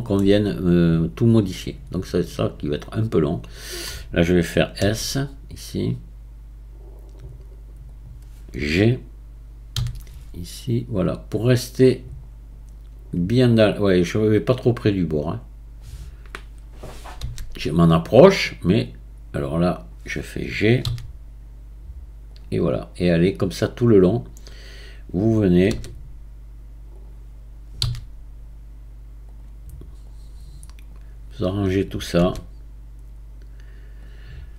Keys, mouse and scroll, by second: 0.5-1.5 scroll up 2, 1.5 click, 2.4 drag, 4.8 s, 9.7 g, 14.9 drag, 17.2 s, 20.8 g, 23.3 drag, 25.7 s, 27.8 g, 30.1 drag, 32.2 s.